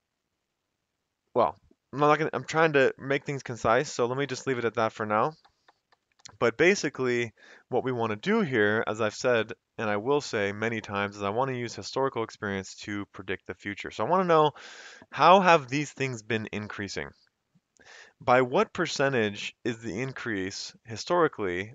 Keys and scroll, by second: 3.8 F2, 4.2 Escape, 5.0 Left, 5.5 Right, 5.7 Right, 5.9 Right, 6.1 Right, 6.6 Right, 6.9 Right.